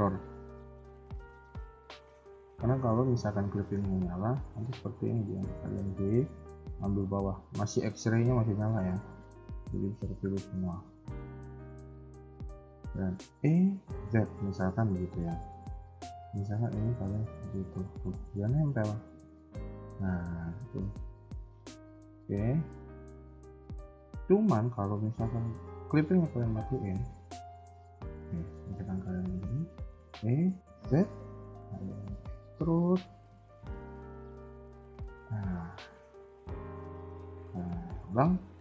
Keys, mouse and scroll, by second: 1.0 click, 1.4 middle click, 2.4 KP_1, 3.9 click, 4.6 b, 6.7 scroll up 1, 8.6 middle click, 10.6 middle click, 10.6 scroll down 2, 10.9 shift+middle click, 11.0 shift+middle click, 11.7 scroll up 1, 13.3 e, 18.4 middle click, 20.5 ctrl+z, 22.2 s, 23.2 a, 23.3 a, 25.8 click, 26.1 scroll down 4, 26.2 KP_1, 26.4 scroll up 3, 27.0 b, 27.7 middle click, 29.0 middle click, 30.0 e, 35.5 middle click, 36.2 ctrl+z, 36.7 KP_1, 37.1 scroll down 1, 37.2 middle click, 38.4 scroll up 2.